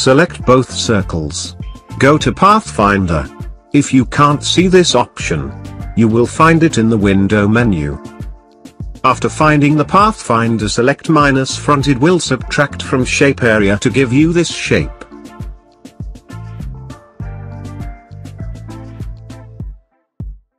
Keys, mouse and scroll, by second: 1.6-3.8 drag, 9.2 click, 10.8-12.5 drag, 12.9 click, 13.0 click, 15.6 click, 18.2-20.5 drag.